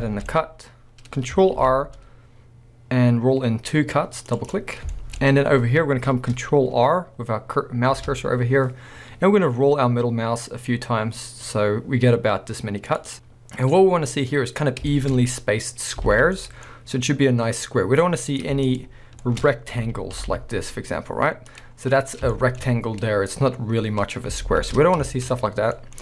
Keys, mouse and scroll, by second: 0.0 shift+middle click, 0.4 scroll up 1, 1.6 ctrl+r, 4.5 click, 4.7 scroll down 1, 4.9 shift+middle click, 8.0 ctrl+r, 13.1 click, 13.7 middle click, 14.7 scroll down 1, 14.9 shift+middle click, 15.2 scroll up 1, 16.1 alt+a, 16.6-18.3 middle drag, 18.3 click, 18.7 shift+click, 19.2 shift+middle click, 19.4-19.8 scroll up 2, 19.8 g, 21.6 click, 21.7-22.3 scroll up 2, 22.3 shift+middle drag, 24.4 ctrl+z, 24.9 scroll down 1, 25.0-26.0 shift+middle drag.